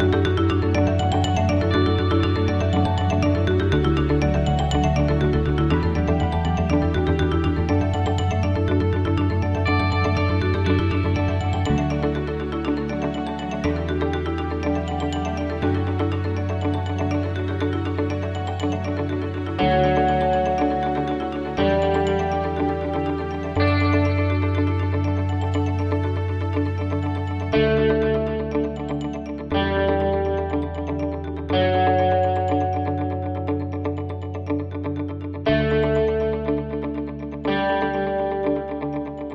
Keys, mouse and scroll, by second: 0.7 click, 1.5 click, 1.9 click, 2.3 click, 25.3 click, 29.0 click, 34.4 click.